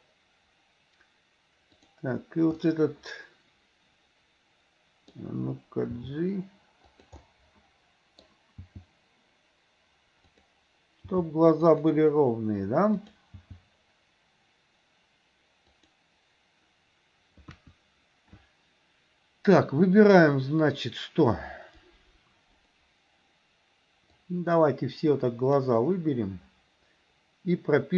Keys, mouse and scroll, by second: 1.8 click, 2.6-5.2 middle drag, 6.0 g, 7.3-8.3 middle drag, 7.3 scroll up 1, 8.3 scroll down 1, 8.6 g, 11.1 g, 13.1 click, 13.5 g, 17.5 KP_1, 24.3-25.8 drag.